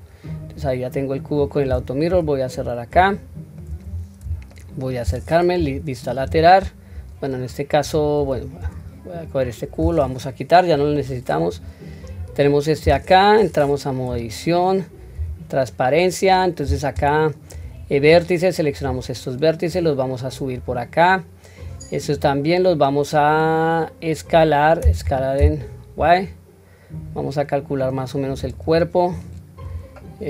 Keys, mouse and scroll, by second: 0.5-2.1 scroll down 1, 2.1-2.4 scroll down 1, 2.1 n, 3.1-3.6 shift+middle drag, 3.9-4.2 scroll up 3, 4.6 shift+middle click, 5.5 KP_3, 6.2-6.8 scroll down 1, 6.8 scroll down 2, 6.9 scroll up 1, 7.4 scroll down 1, 9.3 click, 10.7 Delete, 11.5 click, 12.0-13.8 scroll up 4, 14.0 Tab, 15.2 q, 17.5 1, 18.1-18.8 drag, 19.7-20.6 drag, 21.6-22.1 drag, 29.1-29.6 drag.